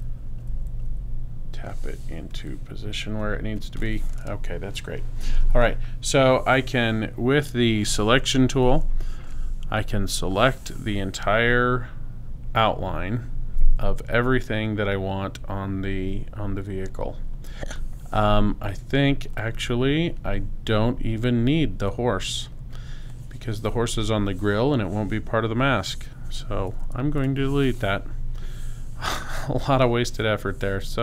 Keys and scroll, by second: 8.4 v, 27.2 BackSpace.